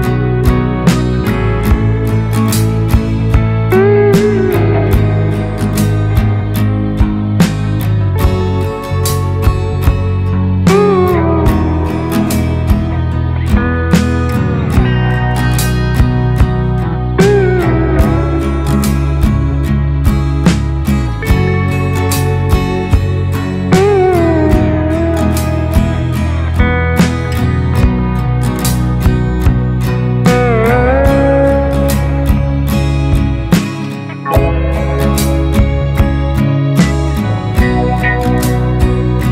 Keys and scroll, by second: 6.6 Up, 6.7 Up, 6.9 Up, 11.0 ctrl+space, 19.7 ctrl+y, 23.8 ctrl+alt+shift+y, 24.7 ctrl+space.